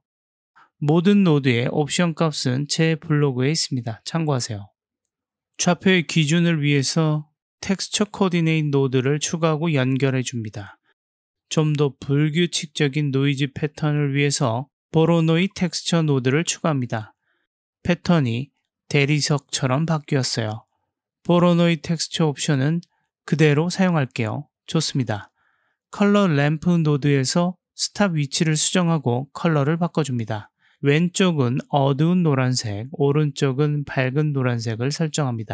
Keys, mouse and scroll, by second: 1.3 Tab, 1.7 click, 3.1 click, 4.6 click, 5.7 middle click, 6.3 middle click, 6.9 click, 7.4 shift+a, 10.4-10.7 drag, 11.0 click, 11.5-12.5 drag, 13.2 g, 14.0 shift+a, 17.7 click, 19.9-21.3 middle drag, 21.3 click, 22.2 click, 28.2-29.5 drag, 29.9 click, 32.6 click.